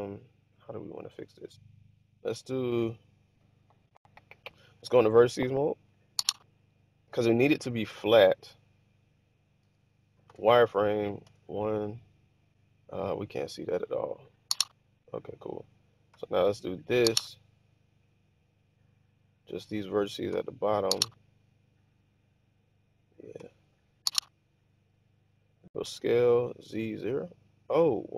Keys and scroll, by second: 9.6-11.2 typing, 16.0 typing, 20.2 typing, 23.3 typing, 25.8-28.1 typing.